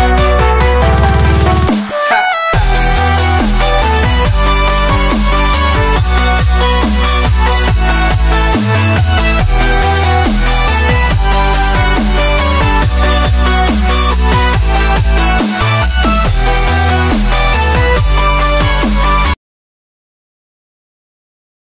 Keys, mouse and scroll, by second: 0.6-1.8 drag, 3.2-3.8 scroll down 1, 3.8-4.3 scroll up 1, 4.3 shift+middle drag, 4.4-4.9 scroll down 1, 4.9-5.2 scroll up 1, 5.2 shift+middle drag, 5.3-5.9 scroll down 2, 5.5 middle drag, 5.9 shift+middle click, 6.3 click, 7.1 click, 9.6 click, 12.6-13.6 scroll down 4, 12.8 middle drag, 13.2 middle drag, 13.6 scroll up 1, 13.8-14.7 shift+middle drag, 14.7 scroll down 5, 14.9 scroll up 1, 15.1-15.8 middle drag, 15.8 scroll up 1, 16.0-16.5 middle drag, 16.6 scroll up 2.